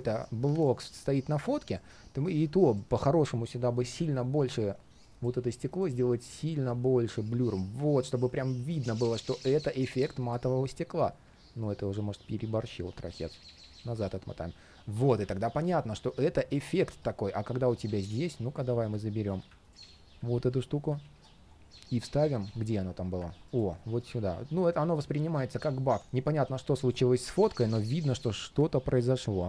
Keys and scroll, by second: 2.2 super+v, 3.8 super+\, 20.3 alt+super+v, 20.9 alt+super+c.